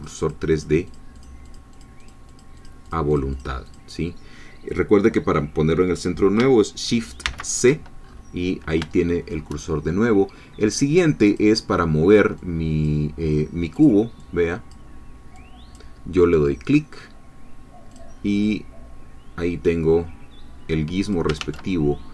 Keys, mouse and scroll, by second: 0.0-0.8 drag, 0.9-1.4 drag, 2.7 click, 3.7-6.4 drag, 7.3 shift+c, 8.0-8.4 shift+scroll up 1, 9.0 shift+middle click, 11.3 click, 12.5 click, 13.7-14.9 drag, 15.4 click, 17.9 click, 19.5-21.3 drag, 21.4 ctrl+z.